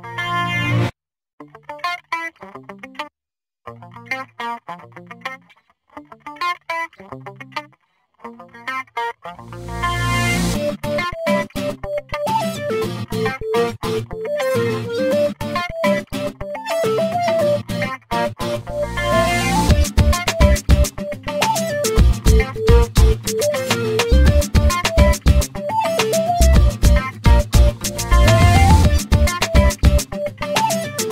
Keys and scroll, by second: 15.4 1, 16.4 Return, 23.8 l, 29.4 8, 30.0 Return.